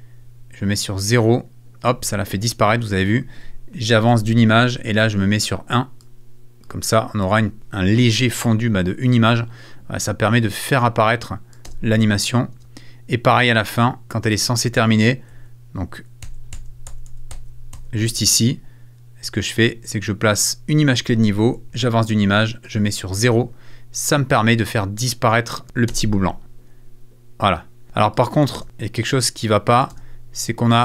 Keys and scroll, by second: 4.1 Right, 11.6 space, 15.3 Right, 16.9 Left, 21.7 Right, 25.9 space, 27.8 space, 29.1 space.